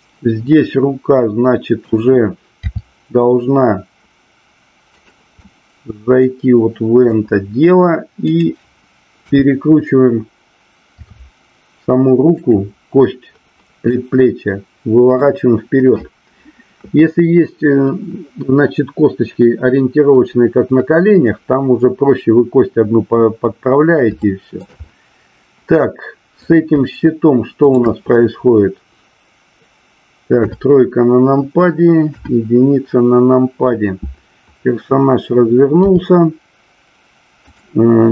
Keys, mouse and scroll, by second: 2.6 r, 5.0 click, 5.5-7.0 middle drag, 8.2 click, 9.2 KP_3, 10.9 r, 13.9-15.1 middle drag, 24.1-24.6 shift+middle drag, 24.9-25.7 middle drag, 26.4 click, 30.3 KP_3, 32.0 KP_1, 35.9 r, 37.5 click.